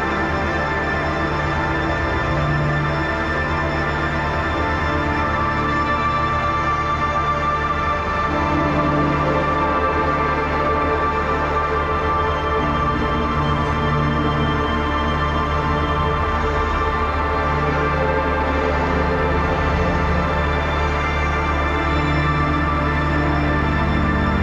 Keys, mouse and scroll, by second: 0.5-4.4 drag, 0.5 typing, 4.4-6.1 alt+shift+drag, 6.3 typing, 6.5 click, 7.3 click, 9.4 ctrl+=, 12.9-14.1 typing, 14.6 click, 16.7 click, 17.0-24.4 typing, 17.3 ctrl+a, 20.6 Return, 23.0 ctrl+a, 23.6 click.